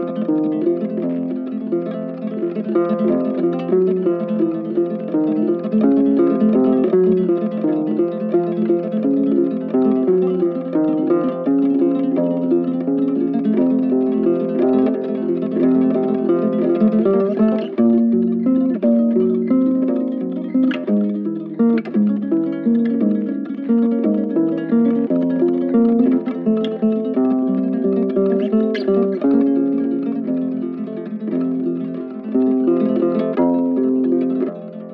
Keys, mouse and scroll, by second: 1.0 ctrl+shift+click, 2.2 ctrl+shift+click, 2.5 ctrl+shift+click, 4.1-5.5 typing, 8.0 double click, 10.9 ctrl+shift+click, 11.9 ctrl+shift+click, 15.8 ctrl+shift+space, 18.4 ctrl+shift+click, 21.9 ctrl+shift+space, 22.3 ctrl+shift+space, 23.5 shift+click, 24.1 shift+click, 24.4 shift+right click, 25.7 shift+click, 27.2 shift+right click, 27.7 shift+click, 30.5 shift+click, 31.1 shift+click, 31.7 shift+click, 31.9 shift+click.